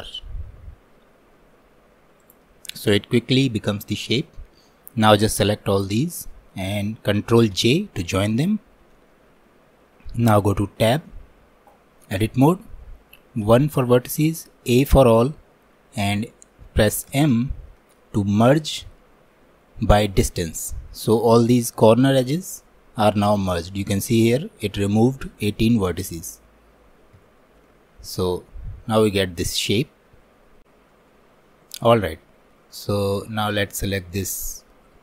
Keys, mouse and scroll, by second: 2.8-7.6 drag, 7.6 ctrl+j, 10.9 Tab, 13.5 1, 27.2 Tab, 27.7-30.7 middle drag, 32.0-33.5 middle drag, 33.5 scroll down 1, 33.8-35.0 shift+middle drag.